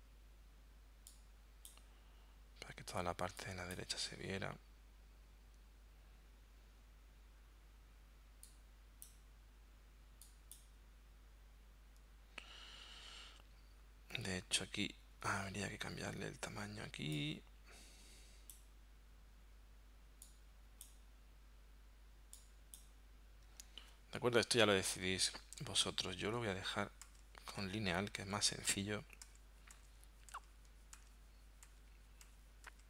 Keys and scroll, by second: 26.4 super+z, 27.1 super+z, 28.2 super+z, 30.4 super+z, 31.0 super+z, 31.7 super+z.